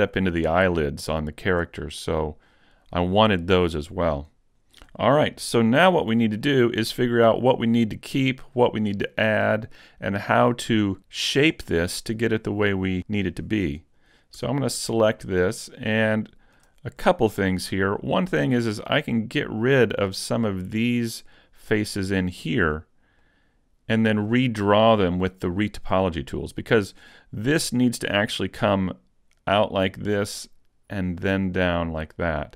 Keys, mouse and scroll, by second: 0.5-0.9 scroll down 2, 0.9 shift+middle click, 1.8 middle click, 5.9 shift+click, 6.5 middle click, 14.1 right click, 14.4 Tab, 14.9-15.5 scroll up 2, 15.3 shift+middle click, 17.1 shift+middle click, 21.4 middle click, 23.2 middle click, 27.1 middle click.